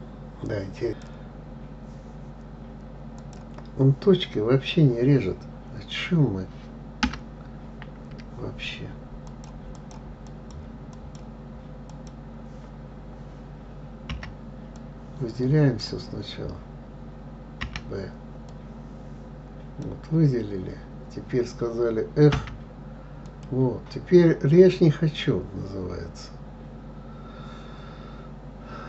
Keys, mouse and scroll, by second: 11.3 click, 14.4 b, 18.0 b, 22.7 f, 23.6 click.